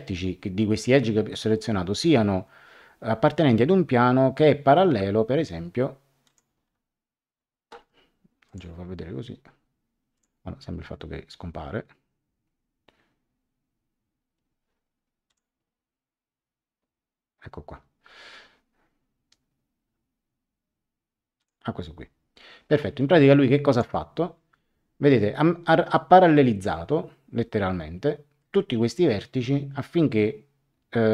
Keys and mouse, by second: 6.2 click, 8.4 click, 10.1 click, 15.2 click, 21.4 click, 23.7 click, 25.9 middle click.